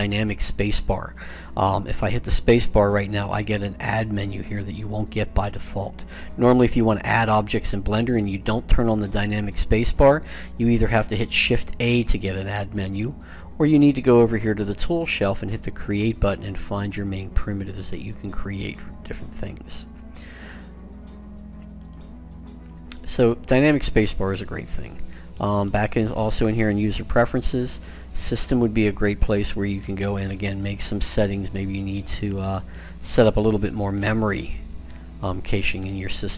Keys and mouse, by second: 1.8 space, 11.0 shift+a, 15.0-16.8 drag, 16.8-21.7 middle drag, 21.7-23.4 drag, 24.1-26.2 drag.